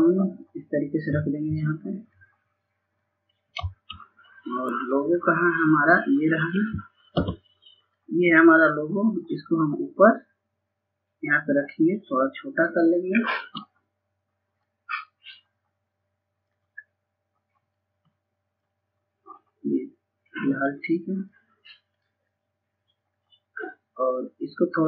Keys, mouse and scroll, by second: 3.3 click, 3.9-4.3 scroll down 1, 4.6 scroll up 1, 5.9 F4, 6.7-11.0 drag, 11.0-11.7 scroll up 1, 11.7-12.3 scroll down 1, 13.3-15.5 shift+drag, 15.5-16.4 scroll up 1, 16.4 click, 17.7-19.3 scroll down 1, 19.3 click, 20.9-21.4 scroll down 1, 22.5-23.1 scroll up 1, 23.3 scroll down 1, 23.8 click.